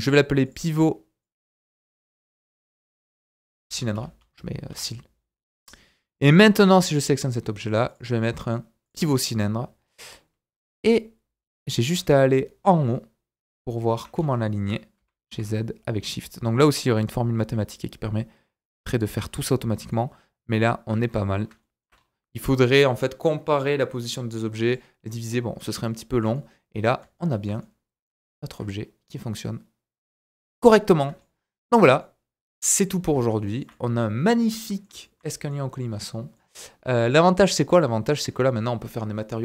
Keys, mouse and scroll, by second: 0.4-6.6 drag, 7.9-10.0 drag, 10.7 g, 12.0-14.0 shift+middle drag, 14.1 scroll up 1, 14.3-19.1 shift+right drag, 15.0 g, 19.3-19.8 scroll down 4, 19.9-20.7 shift+middle drag, 20.7-24.3 shift+right drag, 21.0-21.5 scroll up 4, 21.6 shift+middle click, 21.9-22.4 scroll up 2, 22.4-24.3 scroll down 2, 24.3-24.6 middle drag, 24.3-24.6 scroll down 2, 24.6 click, 24.7-31.0 right drag, 29.8 middle click, 31.0-39.4 shift+middle drag, 31.9 scroll down 1.